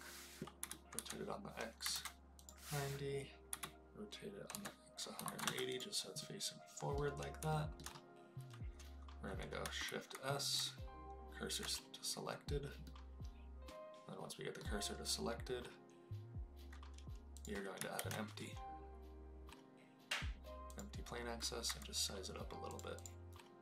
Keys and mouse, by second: 0.6 r, 0.9 x, 1.8 KP_9, 1.9 KP_0, 2.4 click, 3.4 r, 4.5 x, 5.1 KP_1, 5.2 KP_8, 5.4 KP_0, 5.6 click, 6.2 middle click, 7.5 shift+middle drag, 9.8 shift+s, 10.5 shift+s, 12.8-14.5 middle drag, 17.3 click, 17.9 shift+a, 21.6 s, 22.6 click, 22.9 click.